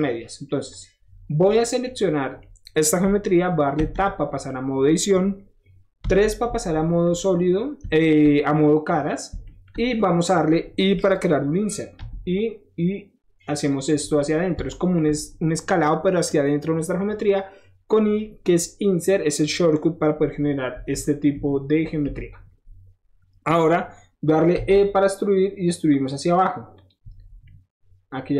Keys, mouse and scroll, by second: 0.1 scroll up 1, 0.7 click, 1.2 scroll down 1, 1.4-2.1 middle drag, 2.4 middle click, 3.1 middle click, 3.8 Tab, 4.2 middle click, 4.4 middle click, 7.0 click, 7.3 middle click, 7.6 middle click, 7.9 shift+middle click, 8.5-13.5 shift+middle drag, 13.5 click, 14.6 shift+middle click, 20.8 KP_1, 21.3 KP_3, 22.0 KP_1, 24.6 e, 26.7 click, 27.1 middle click.